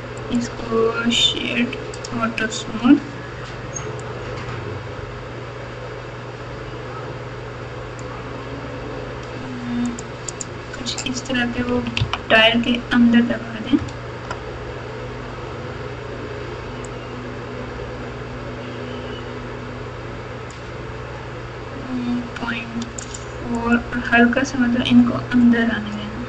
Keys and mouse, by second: 4.0-8.0 drag, 9.8 click, 10.3 click, 11.5 KP_6, 11.7 KP_6, 12.0 KP_3, 12.0 KP_Decimal, 13.8 KP_Add, 14.3 KP_Add, 16.8-20.5 drag, 22.9 click, 23.6 click.